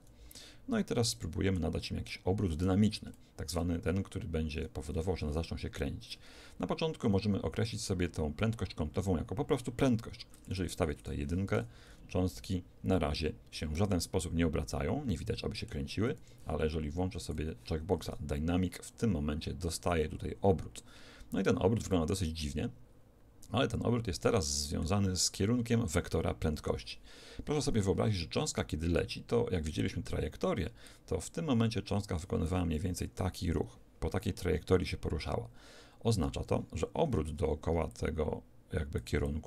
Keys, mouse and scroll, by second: 4.5 Escape, 10.4 click, 11.6 alt+a, 12.9-16.2 middle drag, 16.2 Escape, 17.2 click, 18.0 alt+a, 21.9-24.9 middle drag, 26.4 Escape, 29.3-30.5 d, 30.9 click, 30.9 d, 32.5 d, 37.7-39.4 d, 37.9-39.4 drag.